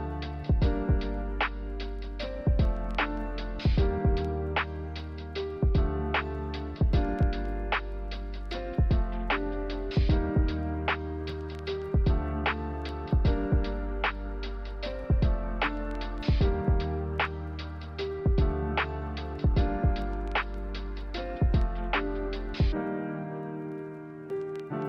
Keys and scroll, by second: 3.1 ₩, 4.7 Delete, 6.6-7.5 typing, 9.2 Delete, 9.9 m, 15.1 b, 17.7 a.